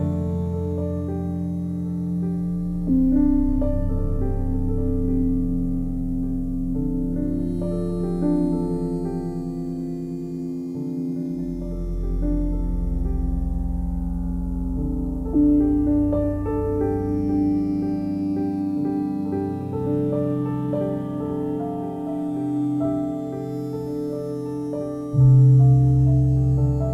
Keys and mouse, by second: 1.3-5.5 alt+drag, 5.9 1, 6.6 ctrl+alt+click, 6.9 alt+shift+click, 7.6 ctrl+alt+click, 10.0 click, 12.0 ctrl+alt+click, 12.5-14.5 ctrl+alt+drag, 15.0 1, 16.7-18.8 drag, 21.1 click, 23.7 click, 25.2 typing, 26.7 click.